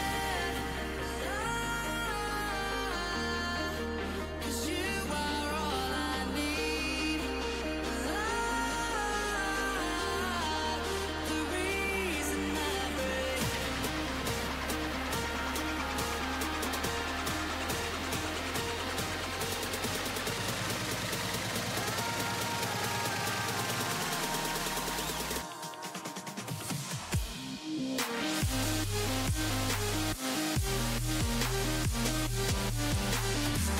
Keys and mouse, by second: 1.0 Tab, 4.3 Tab, 4.3 ctrl+r, 9.0 ctrl+r, 10.2 a, 11.0-12.9 drag, 12.0 g, 13.3 click, 13.6 g, 15.2 g, 19.0 g, 19.9 g, 20.8 g, 23.0 z, 23.2 a, 24.2 c, 25.8 z, 26.7 ctrl+e, 29.3 Tab, 33.4-33.7 right drag.